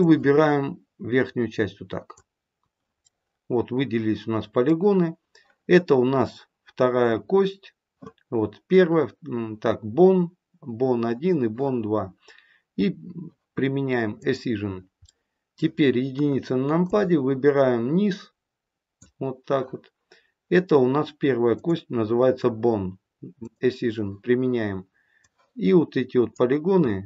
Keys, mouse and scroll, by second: 3.0 middle click, 14.1 click, 15.0 middle click, 16.1 KP_1, 16.8 click, 21.5 click, 23.3 click.